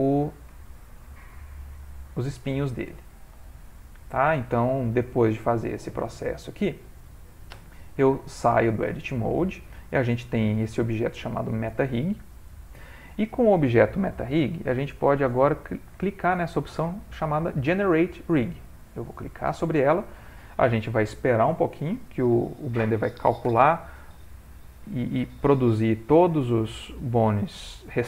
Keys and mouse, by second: 0.6 ctrl+middle click, 1.2 shift+middle click, 1.4 middle click, 3.5 shift+middle click, 4.0 middle click, 5.6 shift+middle click, 6.1 shift+middle click, 6.1 middle click, 7.6 Tab, 8.3 ctrl+middle click, 8.7 middle click, 10.9 click, 12.5 click, 14.4 middle click, 19.4 click.